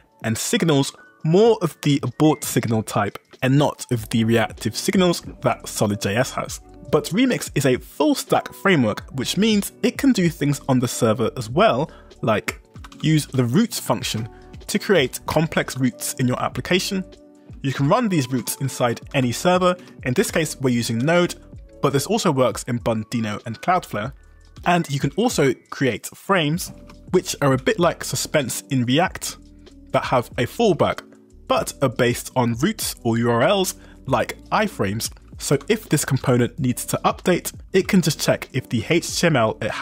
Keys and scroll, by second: 0.3-3.9 typing, 12.6-13.8 typing, 14.2 Escape, 15.0 ctrl+d, 15.7 ctrl+d, 16.8 ctrl+d, 17.3 Escape, 17.9 shift+v, 18.4 Escape, 18.6 k, 19.2 shift+v, 19.9 Escape, 20.2 g, 21.1 shift+v, 24.6 shift+v, 26.9 Escape, 27.7 k, 30.1 shift+v, 31.6 j, 32.3 w, 35.0-36.4 typing, 38.8 shift+v.